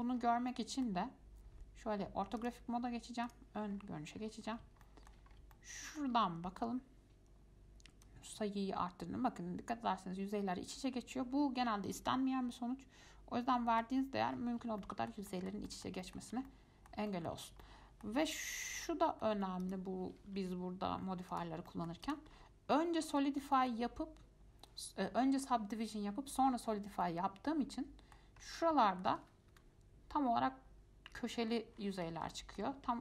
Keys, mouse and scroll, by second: 0.2-0.7 scroll down 3, 0.7-2.6 middle drag, 2.6 click, 3.4 click, 3.9-5.0 scroll up 11, 5.0 shift+middle click, 5.5 scroll up 3, 5.7-8.2 shift+middle drag, 8.2-11.3 drag, 14.4-15.0 scroll down 7, 15.0-16.3 shift+middle drag, 16.7-18.7 middle drag, 18.7 F3, 20.6 z, 21.9 middle click, 22.2 click, 22.5-22.9 scroll up 3, 22.9-26.8 middle drag, 27.2-28.6 middle drag, 28.6-29.1 scroll up 4, 29.1 shift+middle click, 29.7 F5, 31.9-32.5 scroll down 7, 32.5 shift+middle click.